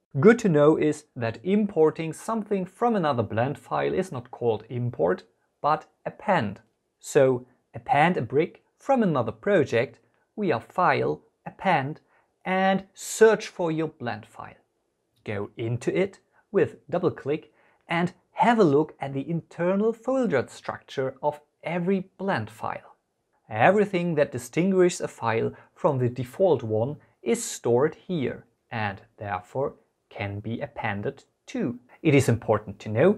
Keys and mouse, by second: 7.7-12.3 drag.